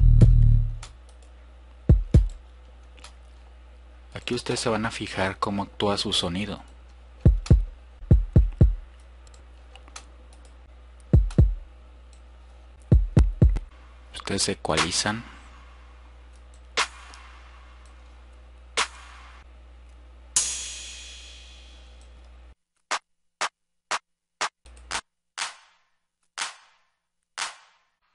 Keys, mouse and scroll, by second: 0.3 click, 2.7 click.